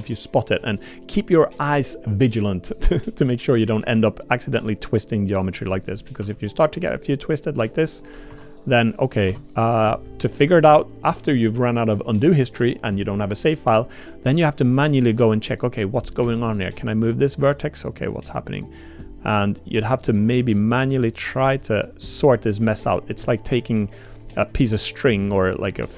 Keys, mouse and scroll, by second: 0.6 middle click, 3.8 r, 6.2 r, 7.3 click, 7.6 r, 8.3 Tab, 9.3 Tab, 10.0 click, 14.3 click, 16.2 1, 16.6 click, 17.0 g, 19.8 click, 20.2 g, 21.3 click, 21.6 middle click, 21.9 g, 23.0 click, 23.2 g, 24.3 click, 24.7 g, 25.6 click.